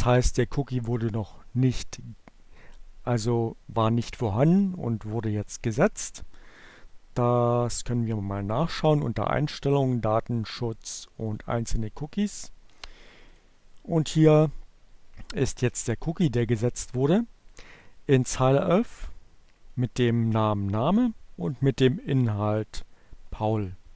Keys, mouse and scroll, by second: 3.3 click, 5.5 click, 6.2 click, 10.3 click, 12.7 click, 13.7 click, 16.1-18.8 drag, 21.5 click, 22.6 scroll down 2, 22.8 click, 23.5 click.